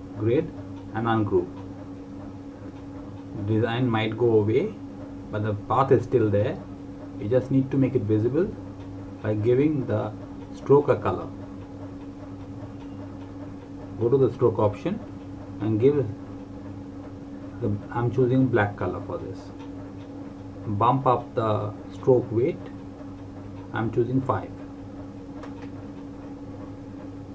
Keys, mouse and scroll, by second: 0.9 click, 8.2 click, 13.0 click, 20.5-21.3 scroll up 1, 23.7 click.